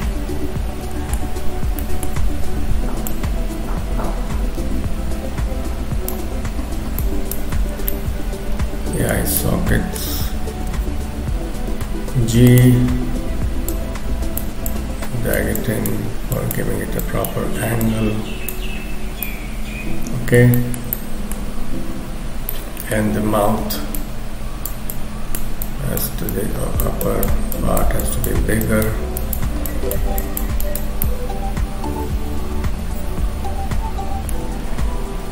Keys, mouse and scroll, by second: 1.4-1.7 scroll up 1, 1.8 shift+middle click, 2.1-2.5 shift+scroll up 4, 3.1 click, 7.0 shift+click, 7.6-8.9 scroll down 3, 7.9 middle click, 9.4 middle click, 10.7 g, 11.7 f, 13.7 click, 14.7 click, 16.3 click, 17.1 shift+click, 17.9 click, 18.7-19.3 scroll down 1, 19.3 middle click, 19.3 scroll down 3, 20.5 shift+middle click, 20.9 middle click, 21.5-22.3 scroll up 4, 22.5 middle click, 23.1 KP_3, 24.9 click, 26.0 click, 26.3 click, 27.1 click, 28.1 click, 28.7 click, 29.7 click, 31.0 scroll down 1, 35.0-35.3 scroll up 2.